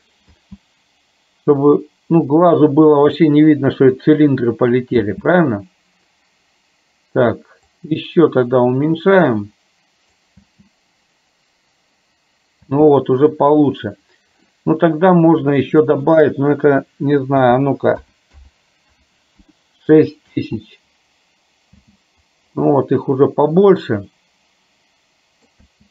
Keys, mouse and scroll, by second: 0.4 space, 5.1 space, 7.8-10.2 drag, 10.6 space, 12.6 space, 15.5-19.7 drag, 18.4 KP_0, 20.5 space, 22.1 space, 22.8-25.5 middle drag, 25.7 space.